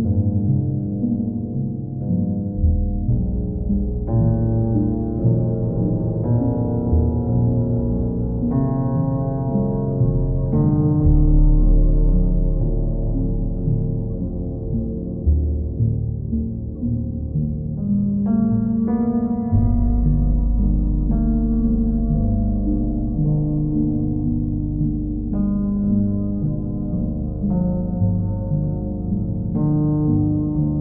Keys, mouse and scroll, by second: 0.2 alt+click, 0.8 click, 3.2 click, 5.5 click, 6.2 click, 8.3 click, 10.7 click, 11.9 click, 12.6 click, 13.0 shift+click, 13.5 alt+click, 14.5 click, 17.0 click, 17.8 click, 18.9 click, 20.8 click, 21.3 click, 22.6 click, 22.9 shift+click, 23.7 alt+click, 27.9 click, 28.4 click, 29.2 click, 29.8 click, 30.2 alt+click.